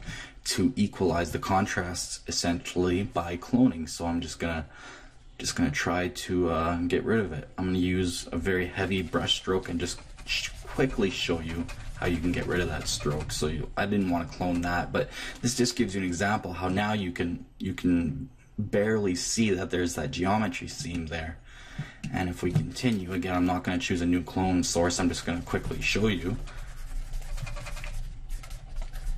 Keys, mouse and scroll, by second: 4.1-7.1 drag, 8.4-11.1 drag, 16.6-18.5 middle drag, 20.9-24.4 middle drag, 24.4-26.3 drag, 26.7-28.7 drag.